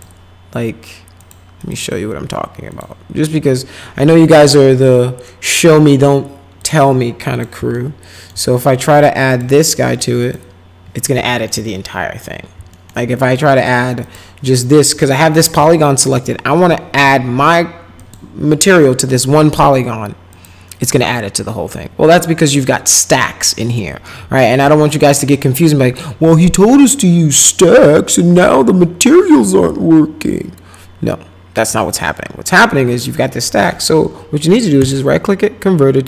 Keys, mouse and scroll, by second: 1.2 click, 1.6 click, 2.7 click, 4.2 click, 6.6 click, 7.3 click, 7.7 alt+middle click, 9.3 click, 10.2 click, 11.3 alt+middle click, 11.8 middle click, 12.7 alt+middle click, 14.0 click, 14.9 click, 15.6 alt+middle click, 18.0 click, 20.3 click, 34.8 right click.